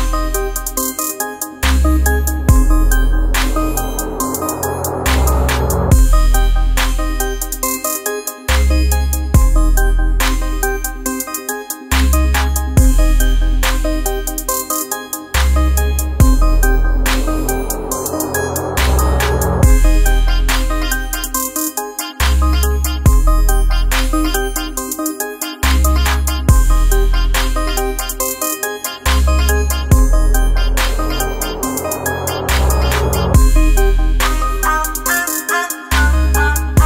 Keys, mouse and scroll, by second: 0.5 shift+l, 4.9 F7, 6.7 click, 7.7-10.2 typing, 11.6 space, 12.3 a, 15.2-23.9 drag, 26.1 space, 27.5 click, 30.9 shift+Num_Lock, 30.9 click, 31.8 shift+l, 32.6 space, 34.1 shift+c, 34.8 shift+r, 35.5 shift+space, 35.8 shift+b.